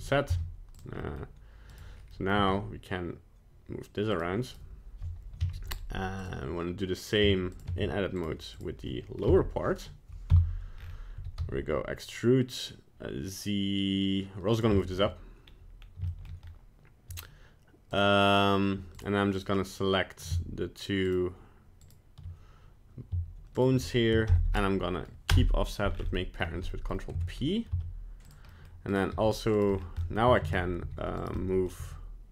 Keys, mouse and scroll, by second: 0.3 z, 1.0 middle click, 1.7 right click, 2.1 middle click, 2.3 g, 4.5 right click, 5.4 z, 7.2 z, 7.7 Tab, 8.2 right click, 8.6 right click, 9.2 KP_1, 10.3 KP_Decimal, 10.8-11.2 scroll up 5, 11.2 e, 14.8 shift+middle click, 15.4-15.8 scroll up 1, 15.8 scroll down 1, 16.1 shift+middle click, 16.4-16.8 scroll up 1, 17.9 right click, 19.0 right click, 19.4 right click, 21.1 shift+right click, 21.8 shift+right click, 23.6 shift+right click, 24.3 ctrl+p, 25.9-26.3 scroll down 5, 26.4 scroll up 3, 26.7 middle click, 27.2 Tab, 27.7 z, 28.5 middle click, 28.9 right click, 29.1 g, 29.7 scroll down 3, 30.0 middle click, 30.5 shift+right click, 30.8 g, 31.4 middle click, 31.8 g.